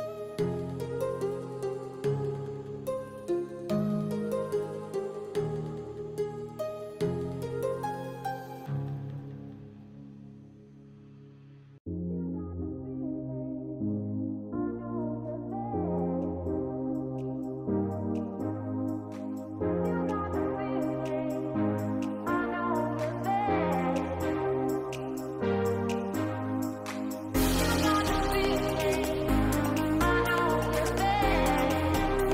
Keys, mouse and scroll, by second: 1.8 h, 2.6 shift+middle click, 3.4 g, 4.6 h, 6.6 middle click, 7.5 middle click, 8.0 shift+middle click, 9.3 middle click, 11.4 click, 12.0 click, 13.1 middle click, 14.2 shift+middle click, 19.3-20.7 drag, 22.1-23.2 drag, 25.4-28.3 drag, 30.5-32.3 drag.